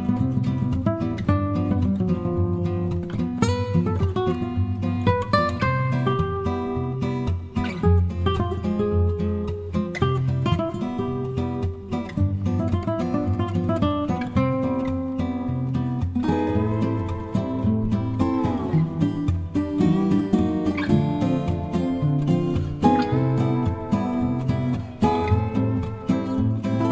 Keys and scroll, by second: 0.0-0.9 typing, 7.5 Return, 9.6 Return, 10.4 Return.